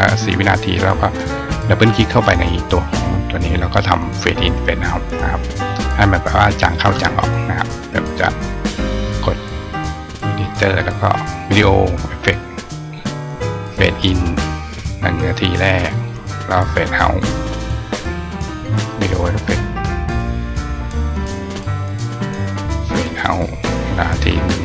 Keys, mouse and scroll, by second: 1.2 click, 1.4 click, 9.7 click, 11.2 click, 14.1 click, 17.7 click, 20.6 click, 22.8 click, 23.9 click.